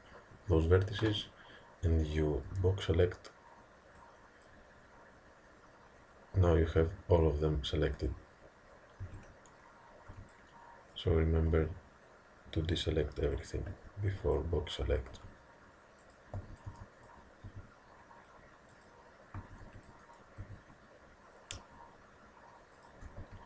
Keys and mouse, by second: 2.5 b, 9.1 a, 10.1 b, 11.5 g, 13.8 a, 14.1 b, 15.1 g, 16.4 a, 16.7 b, 17.5 g, 19.4 a, 19.6 b, 20.4 g, 23.2 a.